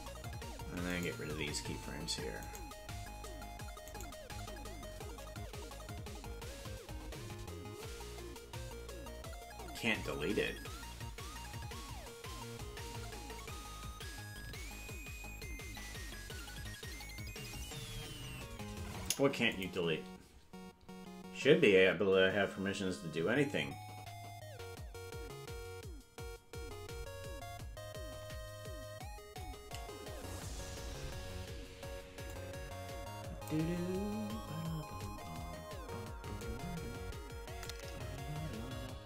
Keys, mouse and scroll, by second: 0.9 right click, 2.4 shift+right click, 4.0 right click, 19.0 Delete, 32.3-33.5 drag, 37.6-39.0 shift+drag.